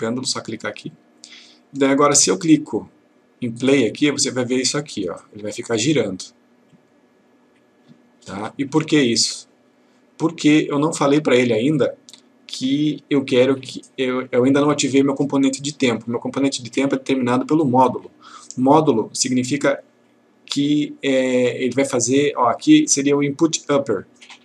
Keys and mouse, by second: 2.5-3.4 click, 10.0 click.